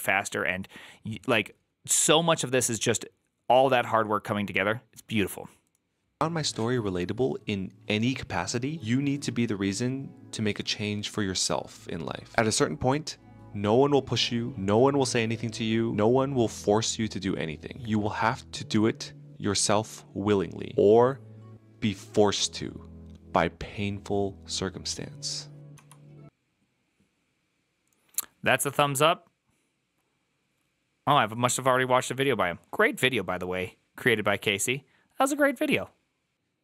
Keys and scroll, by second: 25.6 Escape.